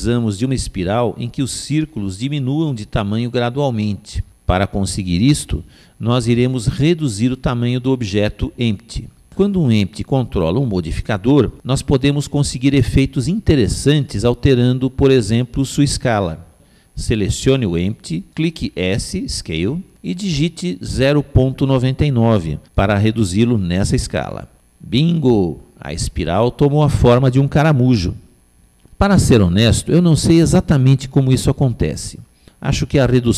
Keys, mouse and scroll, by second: 9.2-11.1 middle drag, 17.9 click, 20.2 s, 24.7-26.5 middle drag, 27.8-33.3 middle drag.